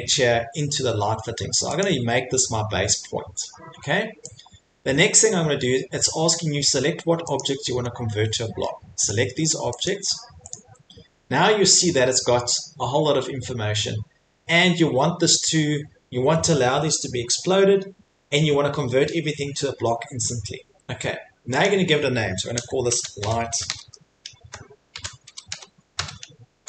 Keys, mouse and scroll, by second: 1.8 middle click, 1.8 click, 5.2 click, 7.8-8.8 scroll, 9.1 click, 9.8 click, 10.5 right click, 13.5 middle click, 21.6 click, 22.7-25.9 typing.